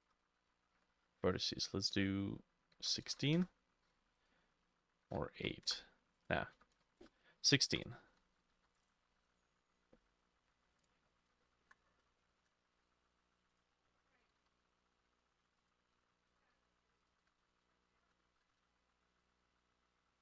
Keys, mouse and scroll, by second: 0.0-2.1 drag, 0.0 BackSpace, 0.1 BackSpace, 2.8-11.1 drag, 2.8 1, 3.1 6, 3.4 Return, 5.4 8, 5.7 Return, 6.6-8.6 typing, 7.1 Return, 11.2-11.9 scroll up 5, 11.4 shift+middle click, 12.1 shift+middle click, 14.3 g, 14.5 y, 15.0 x, 16.0 Tab, 16.0-20.2 drag, 16.4 Tab, 16.7 s, 17.3 g, 17.5 x, 17.7 shift+middle click, 18.7-20.2 shift+middle drag.